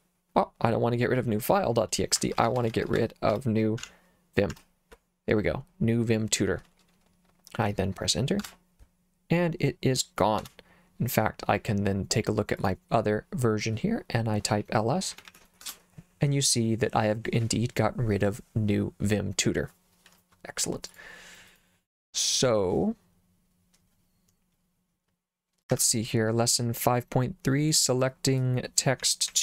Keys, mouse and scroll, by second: 2.2-3.8 typing, 4.5 Tab, 8.4 Return, 10.4 Return, 12.6 click, 14.9-15.8 typing, 20.9 click, 21.5 click, 25.7 Escape, 28.8-29.4 typing.